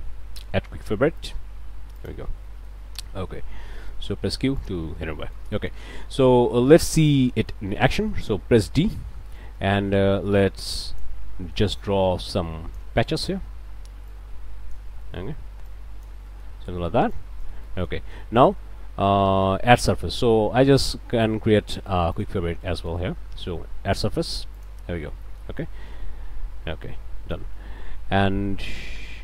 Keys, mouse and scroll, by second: 2.5 click, 2.9 1, 3.7 click, 4.1 q, 4.6 click, 5.0-6.6 scroll up 4, 7.3-8.5 drag, 8.8 d, 9.4 click, 10.4 click, 11.3 middle click, 12.3 click, 13.1 middle click, 14.1 click, 15.0 middle click, 15.7 click, 16.3 middle click, 17.1 click, 17.7 click, 21.1 alt+right click, 22.1 alt+click, 22.6 click, 23.2 q, 24.6 click, 25.2 click.